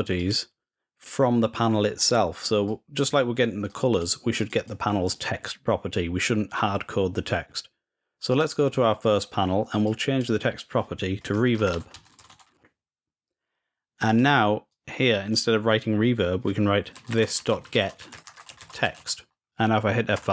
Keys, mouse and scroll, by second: 2.4 click, 3.4-5.1 drag, 8.1-9.1 drag, 9.6 click, 10.2 click, 10.4 click, 13.8-15.1 drag.